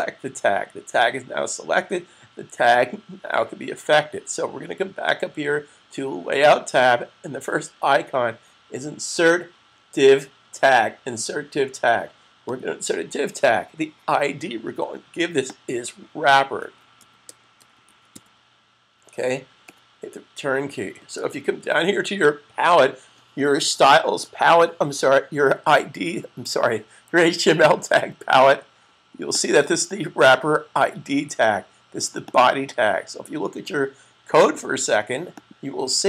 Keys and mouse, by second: 12.2 click, 15.4 click, 16.2-18.5 typing, 21.1 super+s, 29.2 click, 32.0 click, 35.4 click.